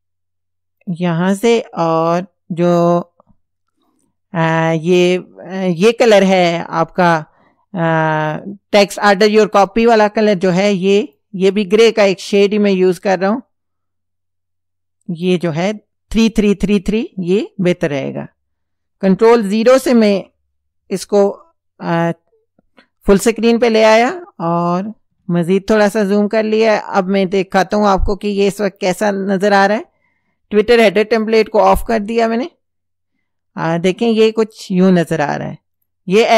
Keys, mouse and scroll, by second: 0.8 click, 5.8 click, 11.1 click, 12.7-15.5 drag, 17.8 click, 19.8 ctrl+KP_0, 21.1 ctrl+scroll down 2, 23.0 ctrl+scroll down 2, 24.3 ctrl+scroll down 2, 26.0 space, 26.5-29.0 drag, 31.4 click, 35.8 click.